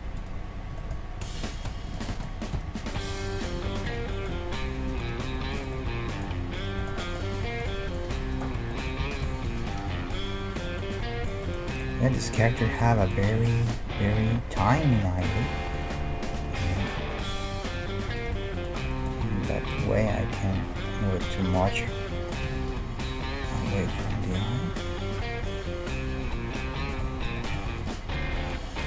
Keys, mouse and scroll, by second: 0.2-2.1 drag, 0.2-2.4 right drag, 1.5 g, 2.2 click, 2.7 g, 3.5 g, 4.0 click, 5.2 g, 8.8 click, 9.0 g, 9.9-14.8 middle drag, 15.0-16.8 middle drag, 15.7-20.7 right drag, 18.9-20.9 middle drag, 19.5 g, 21.1-24.2 middle drag, 22.5 g, 27.1 middle click, 27.8-28.8 right drag, 28.4-28.8 middle drag.